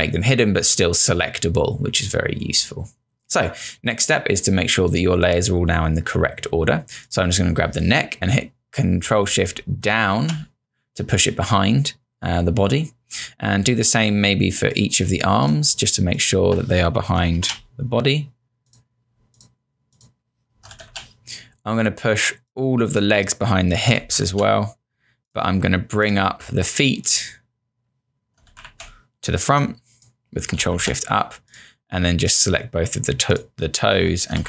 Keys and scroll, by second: 9.9 shift+Down, 20.8 ctrl+Down, 24.2 shift+Down, 28.6 ctrl+Up, 30.7 Up.